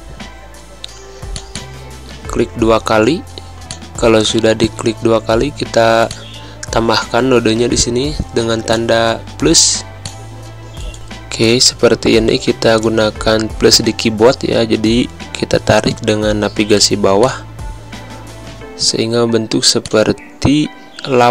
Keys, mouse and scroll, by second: 0.1 a, 1.3 click, 3.7 click, 6.1 click, 8.7 click, 9.7 =, 10.0 click, 11.1 a, 11.4 click, 13.0 Down, 17.2 click, 18.8 ctrl+z, 19.8 click, 20.7 Down.